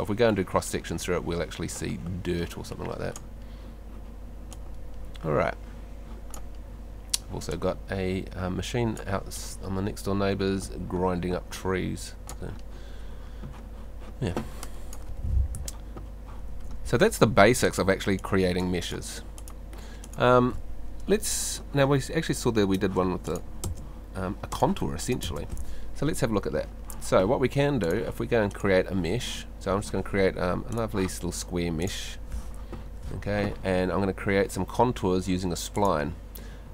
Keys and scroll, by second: 15.6 F2, 22.8 BackSpace, 25.2 BackSpace.